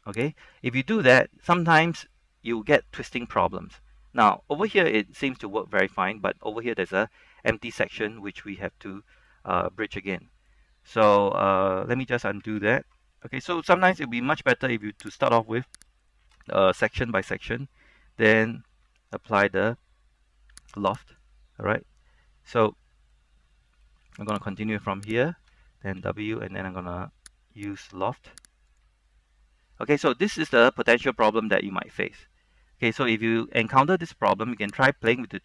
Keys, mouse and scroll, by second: 0.6 click, 1.4-11.1 middle drag, 12.7 ctrl+z, 13.3 middle click, 13.8 scroll up 1, 16.1 alt+shift+right click, 18.6 w, 21.1 click, 22.2 middle click, 23.4 scroll up 1, 23.6 middle click, 24.5 alt+right click, 25.2 alt+shift+right click, 26.1 w, 27.8 click, 29.3-33.0 middle drag, 35.2 click.